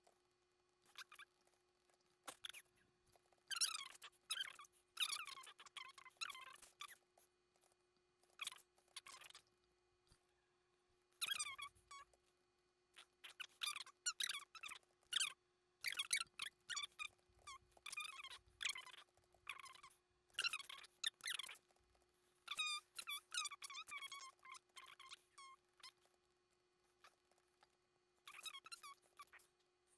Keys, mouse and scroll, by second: 0.0 ctrl+z, 0.8 middle click, 0.9 scroll up 1, 1.1 double click, 1.4 middle click, 1.5 shift+middle click, 1.5 shift+middle click, 1.8 double click, 1.9 shift+middle click, 1.9 scroll down 2, 2.0 middle click, 2.3 shift+middle click, 3.1 shift+middle click, 3.2 shift+middle click, 3.4 shift+middle click, 3.4 shift+middle click, 3.5 shift+middle click, 3.5 shift+middle click, 4.2 middle click, 4.3 shift+middle click, 4.5 shift+middle click, 4.9 middle click, 6.0 middle click, 6.1 shift+middle click, 6.3 scroll up 1, 6.4 shift+click, 6.6 shift+middle click, 7.0 shift+middle click, 7.1 s, 7.5 shift+middle click, 7.7 shift+middle click, 8.2 shift+middle click, 8.5 shift+middle click, 8.8 shift+middle click, 9.3 shift+middle click, 9.3 middle click, 9.4 scroll down 1, 9.5 middle click, 11.0 middle click, 11.3 scroll up 3, 11.3 shift+middle click, 11.4 scroll down 1, 11.5 shift+middle click, 12.4 double click, 13.4 double click, 13.4 scroll down 1, 13.5 scroll up 1, 14.2 middle click, 14.6 shift+middle click, 14.7 shift+middle click, 14.9 shift+middle click, 15.8 shift+middle click, 15.9 shift+middle click, 16.1 shift+middle click, 16.6 middle click, 16.8 shift+middle click, 17.2 shift+middle click, 17.4 ctrl+z, 17.8 middle click, 18.3 shift+middle click, 18.4 scroll down 1, 18.5 middle click, 18.9 middle click, 19.0 shift+middle click, 19.1 shift+middle click, 19.2 shift+middle click, 19.3 s, 19.6 middle click, 19.7 shift+middle click, 20.3 shift+middle click, 20.4 shift+middle click, 20.6 scroll up 1, 20.7 middle click, 21.3 middle click, 21.5 shift+middle click, 21.7 shift+middle click, 22.0 shift+middle click, 22.5 scroll up 1, 22.7 middle click, 23.2 scroll down 1, 23.4 shift+middle click, 24.1 shift+middle click, 24.2 middle click, 24.4 shift+middle click, 24.7 middle click, 24.9 shift+middle click, 26.0 shift+middle click, 26.3 double click, 26.8 middle click, 27.0 shift+middle click, 27.3 shift+middle click, 28.3 scroll up 1, 28.4-28.9 scroll down 2, 28.4 shift+middle click, 28.5 shift+middle click, 28.9 scroll up 1, 28.9 scroll down 1, 29.0 shift+middle click.